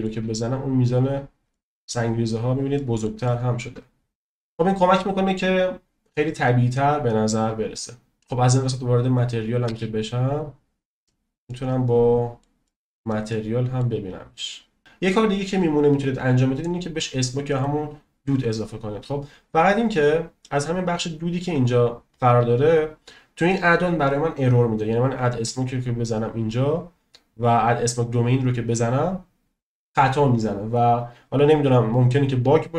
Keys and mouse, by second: 1.6 shift+middle click, 2.4-2.8 right drag, 2.8 middle click, 3.2-3.6 shift+middle drag, 9.0 click, 9.6 space, 11.5-12.5 middle drag, 12.7 shift+middle click, 13.4 middle click, 14.9 space, 17.6 right click.